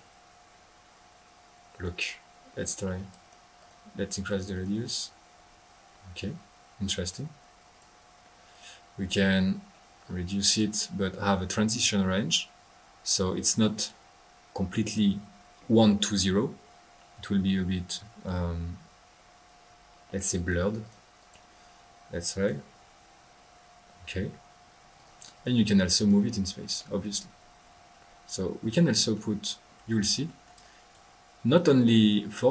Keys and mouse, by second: 3.1-3.4 drag, 3.6 click, 4.3 drag, 4.5 click, 5.0 click, 7.7 click, 8.5-8.9 drag, 9.0 middle click, 9.7-10.7 middle drag, 17.0 middle click, 20.3 click, 21.2 click, 21.6 middle click, 22.3 click, 24.9 click, 25.3 drag, 25.5 drag, 25.9 click, 26.7 middle click, 29.8 click, 30.5 middle click, 30.6 right click.